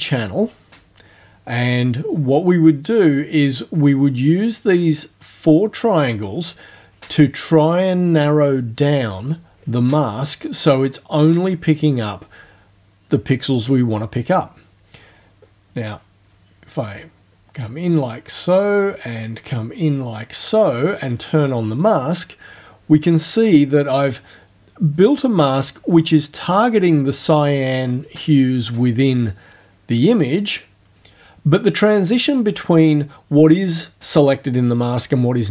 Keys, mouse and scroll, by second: 15.4-18.2 drag, 19.2-20.7 drag, 21.5 click.